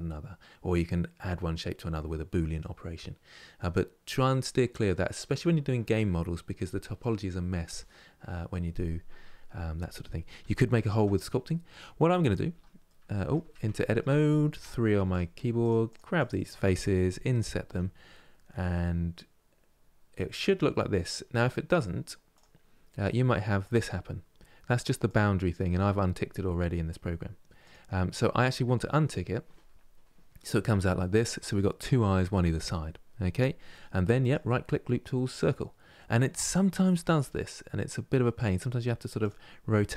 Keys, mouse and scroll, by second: 9.6-10.2 scroll up 1, 10.2 shift+middle click, 10.9-11.2 scroll up 2, 12.2 Tab, 12.6 middle click, 13.1 Tab, 13.5 shift+middle click, 14.3 3, 14.8-17.4 drag, 17.4 i, 23.3-30.3 drag, 33.9-36.9 right drag, 36.9 r.